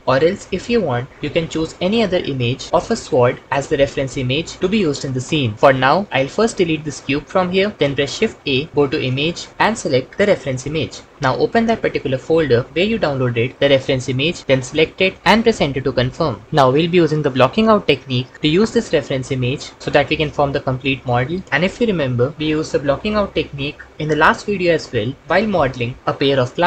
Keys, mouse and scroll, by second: 6.6 x, 8.2 shift+a.